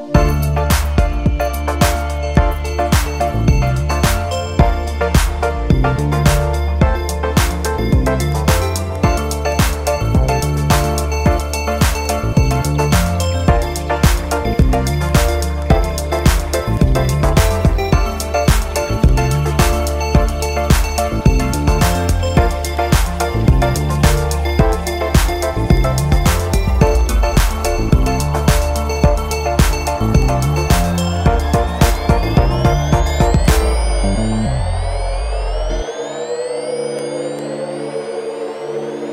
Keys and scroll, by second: 34.6 super+0.